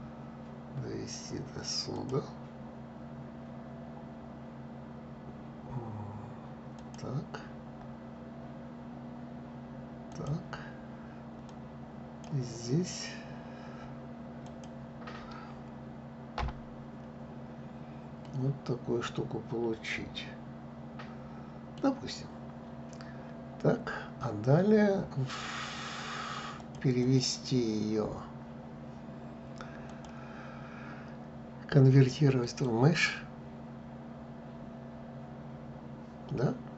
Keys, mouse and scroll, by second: 17.9-24.4 middle drag, 26.2 click, 29.5-32.5 drag.